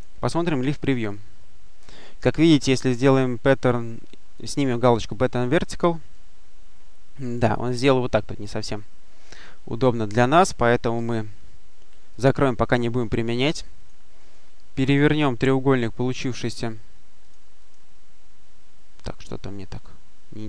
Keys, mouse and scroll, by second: 0.2 click, 4.2 click, 12.0 click, 13.0 click, 13.6 click, 14.8 click, 16.3 click, 17.1 click, 18.4-18.8 scroll down 1, 18.8-19.4 scroll up 1.